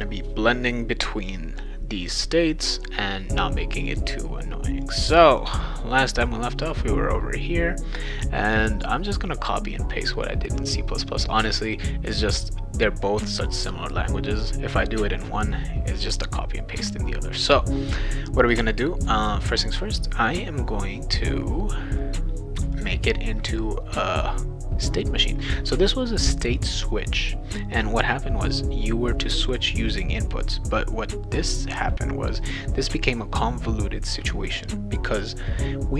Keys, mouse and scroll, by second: 4.8 click, 5.3 click, 22.7 click.